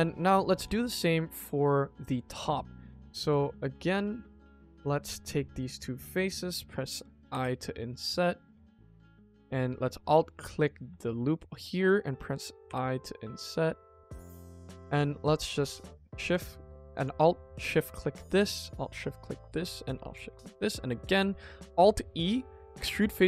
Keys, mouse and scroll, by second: 0.1 shift+middle drag, 0.6 ctrl+s, 0.9 middle drag, 1.3 shift+middle drag, 1.6 middle drag, 1.9 middle drag, 2.3 Tab, 2.6 middle click, 3.0 middle click, 3.4 middle click, 4.3 click, 4.6 middle click, 4.8 scroll up 1, 4.9 middle click, 5.2 scroll down 1, 5.3 middle click, 5.9 shift+click, 6.2 middle click, 7.2 i, 9.0 middle click, 10.1 click, 10.5 alt+click, 11.3 middle click, 12.6 i, 14.4 middle click, 14.4-14.8 scroll up 1, 15.5 alt+shift+click, 16.2 click, 16.9 alt+click, 18.5 alt+shift+click, 19.0 middle click, 20.0 alt+shift+click, 20.3 middle click, 21.0 alt+e.